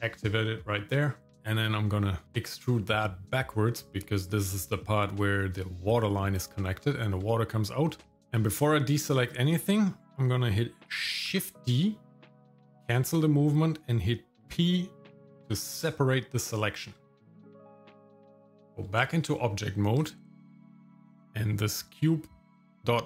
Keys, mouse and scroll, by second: 1.3 shift+middle click, 2.2 e, 6.8 shift+middle click, 7.7 shift+middle click, 11.3 shift+d, 14.4 p, 16.6 shift+middle click, 17.6 Tab, 19.0 shift+middle click, 19.4 middle click, 20.0 click, 21.0 click.